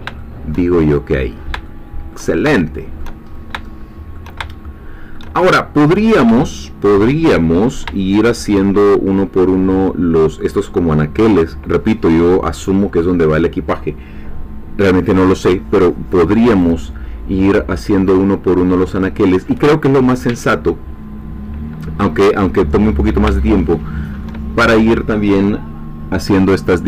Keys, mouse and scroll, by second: 0.2 shift+middle click, 0.9-1.5 shift+scroll down 2, 1.6 shift+middle click, 2.6 shift+middle click, 3.3 shift+scroll up 1, 3.6 shift+middle click, 4.5-5.7 shift+middle drag, 5.9-6.3 scroll down 2, 6.5 shift+middle click, 7.4-7.8 shift+scroll down 2, 8.1 shift+middle click, 23.4-24.8 shift+middle drag.